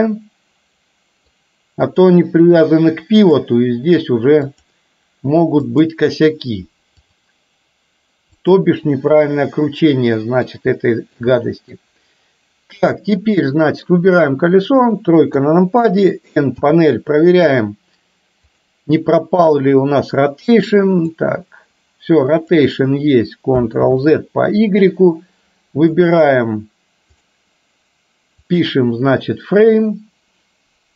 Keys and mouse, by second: 0.1-1.4 middle drag, 3.4-4.7 drag, 5.7 click, 7.1-8.6 drag, 9.1-10.6 middle drag, 10.9-11.4 shift+middle drag, 11.5 middle click, 13.0 click, 15.4 KP_3, 16.6 n, 18.6 click, 21.2-22.6 drag, 24.0 ctrl+z, 26.0-27.4 drag, 28.5-30.9 drag.